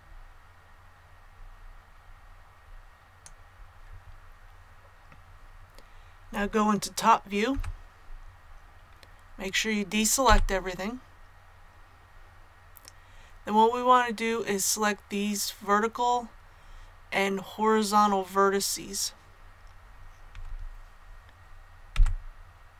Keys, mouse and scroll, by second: 7.5 KP_7, 10.2 a, 21.8 b.